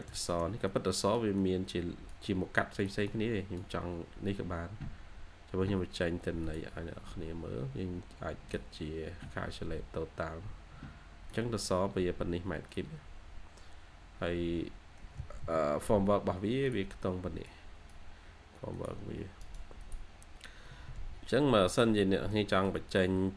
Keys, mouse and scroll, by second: 0.0 shift+middle click, 2.9 double click, 15.1-15.8 typing, 19.3 right click, 20.6-22.4 typing, 21.6 scroll up 1, 22.2 middle click, 22.9 scroll up 1, 22.9 middle click.